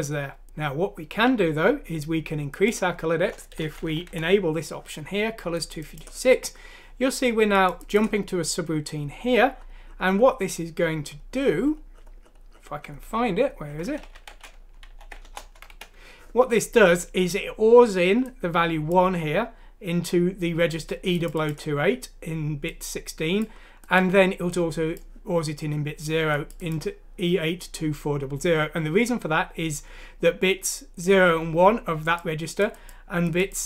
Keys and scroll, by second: 3.8 Home, 4.1 Delete, 14.3 ctrl+f, 15.3 Return, 15.7 Escape.